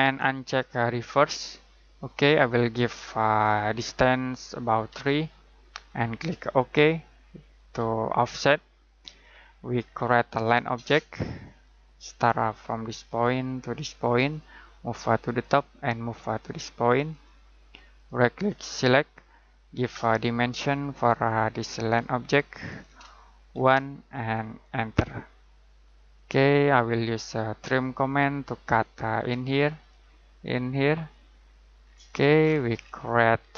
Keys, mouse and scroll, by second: 4.9 3, 6.5 click, 9.2-11.4 scroll down 1, 11.5 click, 17.9 right click, 18.7 click, 23.5 1, 24.6 click, 27.6 click, 31.8 scroll down 1, 32.0-32.5 scroll up 1, 33.4-33.5 scroll down 1.